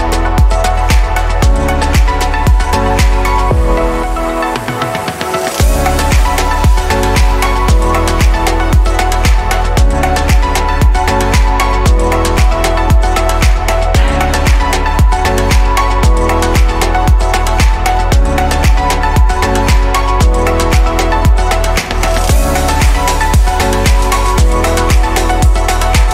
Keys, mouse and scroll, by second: 0.4-6.3 drag, 7.8-9.5 drag, 9.5 middle click, 10.4 scroll down 3, 12.1 ctrl+j, 13.1-14.3 scroll down 2, 14.6 click, 17.1 right click, 18.1 r, 21.9 click, 23.1-24.6 middle drag, 24.6 click, 25.0-25.4 scroll up 2, 25.4-26.1 shift+middle drag.